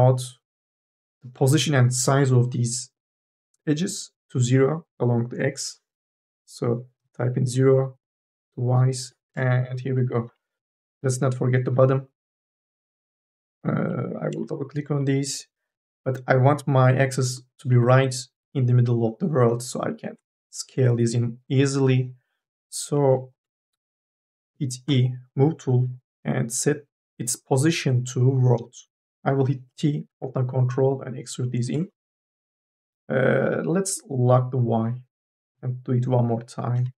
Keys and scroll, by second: 7.1 KP_0, 7.8 Return, 10.6 1, 11.0 2, 11.2 e, 11.4 q, 13.6 2, 24.7 e, 29.5 t, 33.1 ctrl+z, 36.7 e.